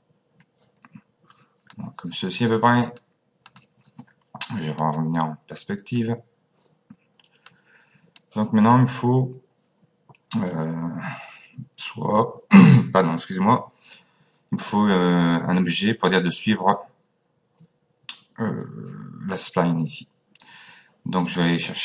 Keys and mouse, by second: 2.8 click, 4.7 click, 5.9 click, 8.1 click, 21.3 click.